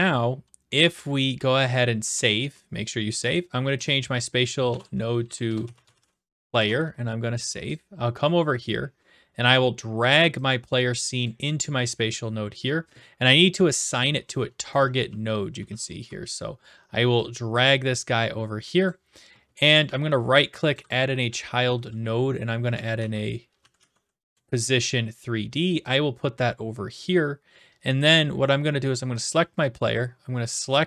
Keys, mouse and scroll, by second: 2.1 ctrl+s, 3.3 click, 3.8 click, 4.7-6.9 typing, 4.8 click, 7.8-8.9 drag, 11.2 click, 14.3 click, 14.6-15.6 typing, 16.0 right click, 18.8 click, 19.9 right click, 20.7 click, 22.5-24.4 typing, 26.9 click, 29.2 click, 30.5-30.8 drag.